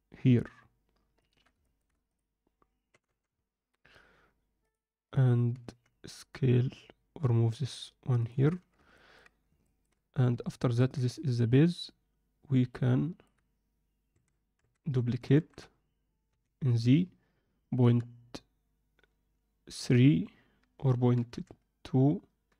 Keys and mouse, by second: 1.6 alt+shift+middle click, 2.9 g, 5.0 click, 5.5 g, 9.6 ctrl+alt+middle click, 10.6 ctrl+alt+middle click, 12.7-13.2 middle drag, 14.1 a, 14.5 Tab, 15.3 shift+d.